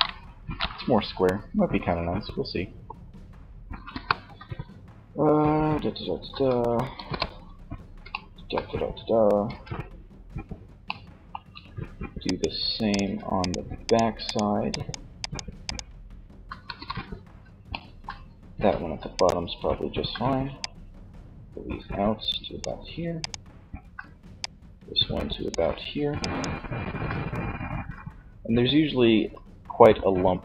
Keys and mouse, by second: 3.0 KP_1, 3.3 z, 5.2 z, 6.2 KP_3, 8.6 a, 15.7 KP_3.